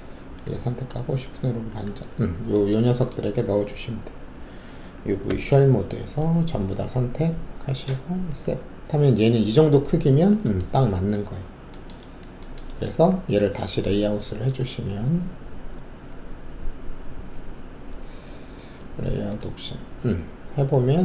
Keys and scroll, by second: 5.2 alt+5.